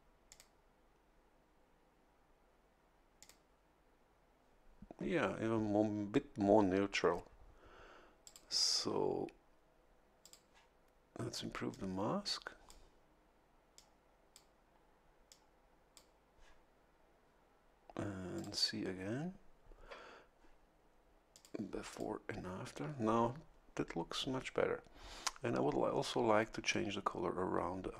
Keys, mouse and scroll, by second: 0.3 click, 3.2 click, 8.2 click, 10.2 click, 11.7-12.8 drag, 13.7 click, 15.3 click, 18.3 click, 21.3 click, 21.9 click.